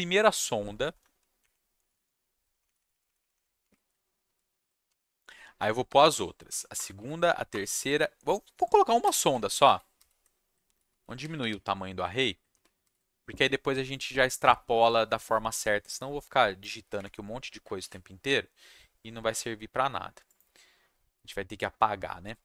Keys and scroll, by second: 0.6 Down, 0.7 Down, 1.0 Down, 1.4 Up, 1.7 Down, 1.9 Down, 2.5 shift+Up, 2.6 shift+Up, 2.7 shift+Up, 2.9 shift+Up, 3.0 shift+Up, 3.2 shift+Up, 3.3 shift+Up, 4.2 ctrl+c, 4.4 ctrl+v, 4.8 ,, 5.5 Return, 5.8 ctrl+v, 6.4 ,, 6.7 Return, 6.9 ctrl+v, 7.0 =, 7.2 ,, 7.3 =, 7.5 Return, 7.6 ctrl+v, 9.0 =, 9.4 ctrl+z, 9.6 ctrl+z, 9.9 ctrl+z, 10.2 =, 10.6 ctrl+z, 10.9 ctrl+z, 11.2 ctrl+z, 11.5 ctrl+z, 12.0 =, 12.5 ctrl+z, 12.8 ctrl+z, 16.9 1, 17.8 ctrl+shift+s.